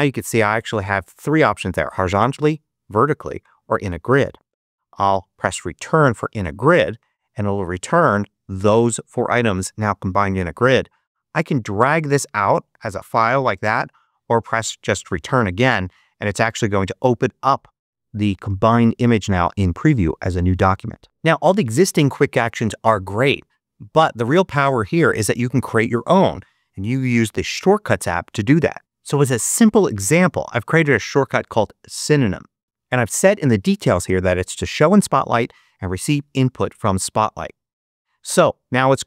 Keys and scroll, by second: 2.5 Down, 5.8 Return, 15.0 Return.